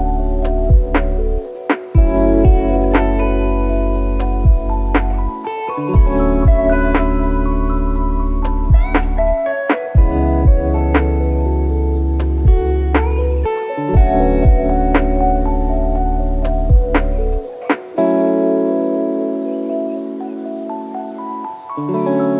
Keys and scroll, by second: 5.8 F3, 7.6 ctrl+e.